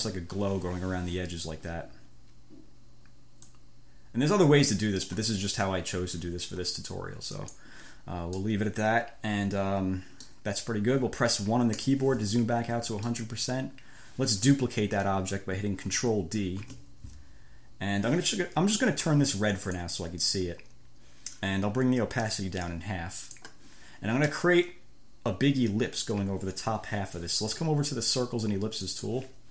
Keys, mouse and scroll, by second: 3.7-5.5 drag, 7.7 click, 8.7-10.7 drag, 12.0 1, 12.6 click, 16.8 ctrl+d, 19.8 click, 20.5 middle click, 22.9 click, 29.2 click.